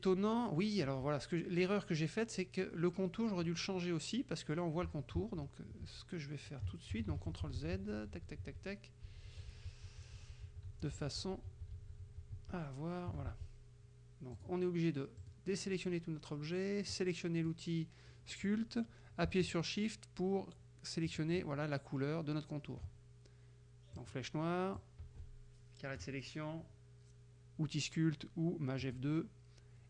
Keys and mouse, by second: 5.2 ctrl+z, 7.0 ctrl+z, 14.4 click, 15.3 click, 17.0 click, 21.1 shift+click, 24.0 click, 24.8-26.2 drag, 28.9 click.